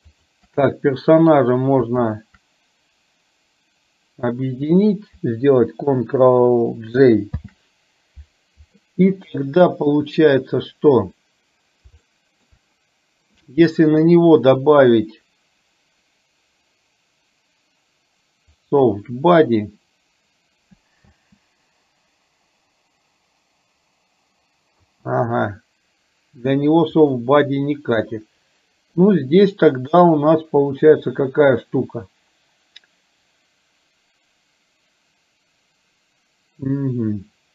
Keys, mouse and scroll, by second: 0.2 shift+click, 2.2 shift+click, 7.4 ctrl+j, 12.1 shift+middle click, 18.6 click, 21.2 space, 24.9 space, 27.2 click, 29.1-30.1 middle drag.